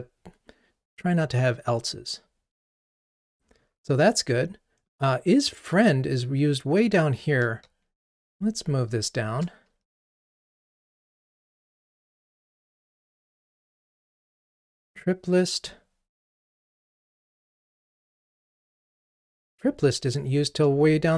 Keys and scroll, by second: 8.3 alt+shift+Down, 8.9 alt+shift+Down, 10.3 ctrl+r.